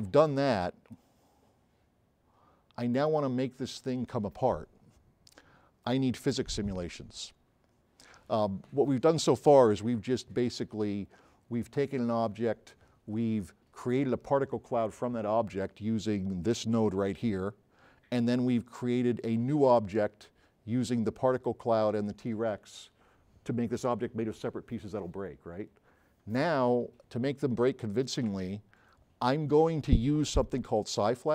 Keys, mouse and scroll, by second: 19.3 click, 30.5 s, 31.0-31.3 right drag.